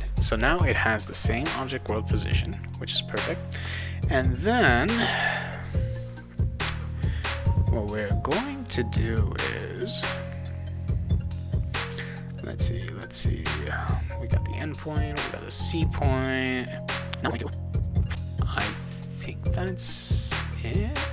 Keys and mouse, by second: 2.9 click.